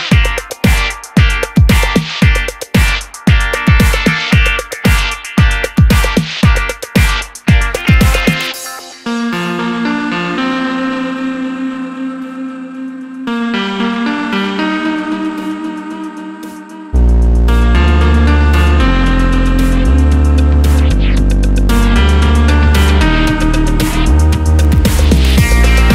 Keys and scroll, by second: 2.4 Page_Down, 2.5 Page_Down, 2.8 Down, 3.8 Right, 3.9 Right, 4.9 Left, 5.0 Left, 21.1 super+a.